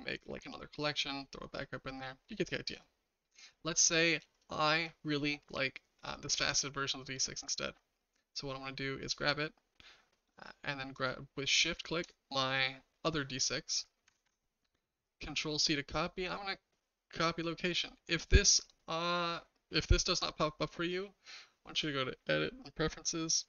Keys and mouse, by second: 10.9 shift+click, 14.1 ctrl+c, 21.8-23.4 drag.